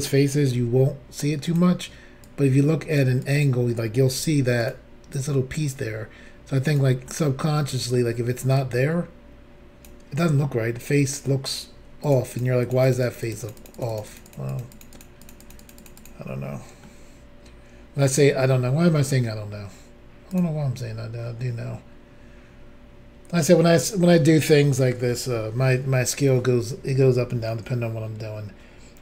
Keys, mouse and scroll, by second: 0.6 f, 1.5 click, 1.6 click, 2.3 click, 3.2 click, 4.2 f, 4.6 click, 4.7 click, 5.2 click, 7.1 middle click, 8.6 click, 12.1 shift+click, 12.1 shift+click, 12.3 shift+click, 12.4 shift+double click, 12.7 shift+click, 12.7 shift+click, 12.9 shift+click, 12.9 shift+double click, 13.1 shift+click, 13.2 shift+click, 13.2 shift+click, 13.3 shift+double click, 13.4 shift+click, 13.5 shift+click, 13.6 shift+click, 13.7 shift+double click, 13.8 shift+click, 13.8 shift+click, 13.9 shift+click, 14.0 shift+double click, 14.1 shift+click, 14.2 shift+click, 14.3 shift+click, 14.4 shift+double click, 14.5 shift+click, 14.6 shift+click, 14.7 shift+click, 14.8 shift+double click, 15.0 shift+click, 15.0 shift+click, 15.2 shift+click, 15.3 shift+double click, 15.4 shift+click, 15.5 shift+click, 15.6 shift+click, 15.7 shift+double click, 15.8 shift+click, 15.8 shift+click, 16.0 shift+click, 16.0 shift+double click, 16.4-16.8 scroll down 3, 16.8 middle click, 17.6 scroll up 1, 18.8 middle click, 20.3 click, 20.4 click, 20.8-21.6 scroll up 2, 21.7 scroll down 1, 22.1 scroll up 1, 22.9 scroll down 2.